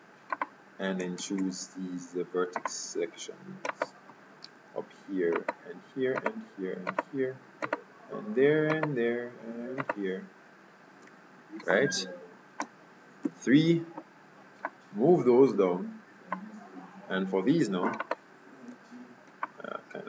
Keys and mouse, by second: 1.3 ctrl+Tab, 3.8-11.5 right drag, 13.4 KP_3, 14.8-16.4 drag, 18.1-19.5 right drag, 19.5 middle click.